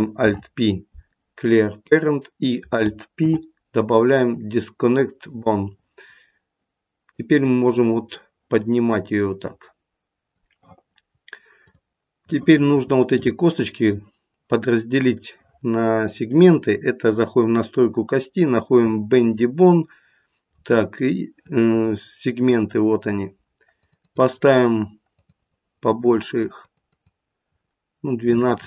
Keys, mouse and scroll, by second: 0.1 alt+p, 3.2 alt+p, 7.1 click, 11.6 click, 17.4 click, 19.2 click, 20.5-22.1 scroll down 3, 22.1 scroll down 2, 23.8 click, 24.0 click, 25.1 click, 25.4 click, 25.6 click, 25.8 click, 26.1 click, 26.3 click, 26.6 click, 26.9 click, 27.4 click.